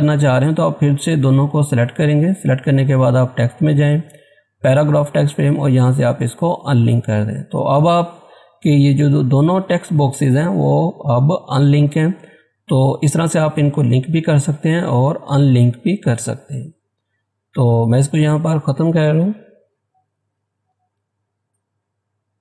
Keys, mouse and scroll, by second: 6.5 click, 12.5 click, 16.3 click, 16.4 click, 19.5 Delete, 21.9-22.4 scroll down 1.